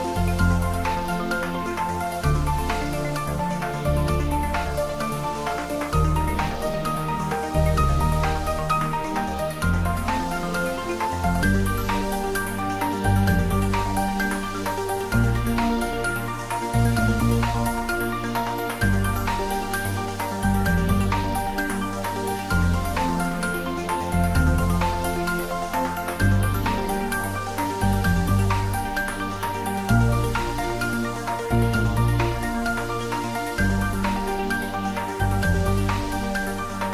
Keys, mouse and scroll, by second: 2.3-3.2 scroll up 1, 8.0-11.0 drag, 14.9 Tab, 17.6 click, 21.0-22.0 scroll down 1, 22.0-24.4 middle drag, 24.4 click, 28.4 click, 29.1-29.6 scroll up 1.